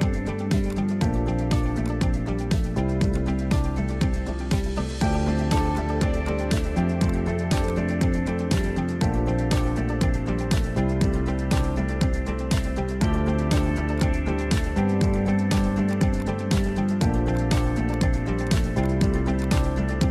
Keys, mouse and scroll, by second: 0.2 3, 0.7 click, 1.0 middle click, 1.8 shift+click, 2.4 Delete, 3.6 scroll down 4, 3.8 middle click, 4.1 scroll up 1, 4.3-4.7 scroll down 1, 4.7 2, 4.8 scroll up 3, 5.0 middle click, 5.7 click, 7.0 shift+click, 8.2 shift+click, 9.0 ctrl+b, 14.6 Tab, 15.9-16.9 right drag, 16.9 drag, 17.3 click, 17.9 click, 18.4 drag, 18.8-20.1 drag.